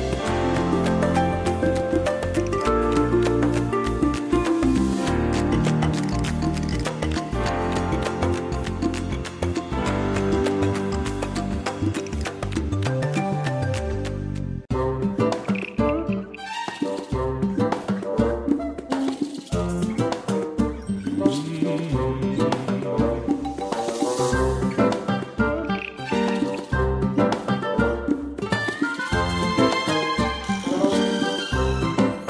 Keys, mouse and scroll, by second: 1.7 space, 3.2 click, 4.0 space, 5.7 click, 11.9 click, 23.0 click.